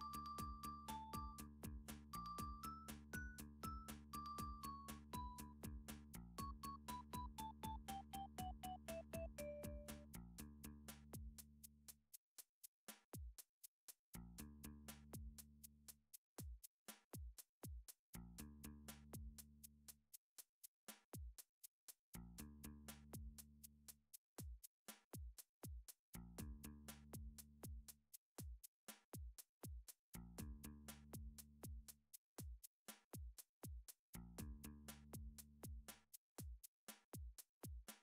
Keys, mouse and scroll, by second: 0.0 click, 0.8 s, 1.5 click, 2.4 r, 3.8 shift+d, 5.1 click, 6.8 r, 7.6 click, 8.3 s, 10.5 click, 11.3 g, 12.3 click, 12.9 d, 13.8 click, 14.7 s, 15.6 click, 16.4 g, 17.9 click, 18.2 middle click, 18.3 middle click, 18.8 shift+middle click, 19.0 shift+middle click, 19.8 middle click, 20.3 middle click, 21.3 alt+click, 21.6 scroll up 6, 21.8 scroll, 22.1 s, 23.2 click, 23.7 g, 24.3 click, 25.3 d, 26.9 click, 27.3 r, 28.3 click, 28.9 g, 30.1 click, 30.6 s, 31.3 click, 31.9 d, 32.9 click, 33.3 r, 34.4 click, 35.2 s, 36.8 click, 37.2 g.